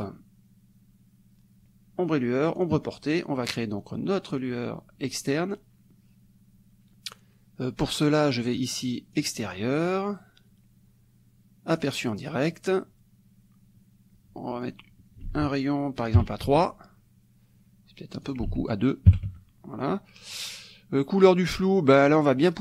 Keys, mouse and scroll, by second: 2.7 click, 3.6-4.7 drag, 8.5 click, 9.2 click, 11.7 click, 14.6 click, 15.3 ctrl+a, 16.2 KP_3, 16.5 Tab, 18.2 click, 18.5 ctrl+a, 19.1 KP_2, 19.3 Tab, 20.3 click, 22.2 click.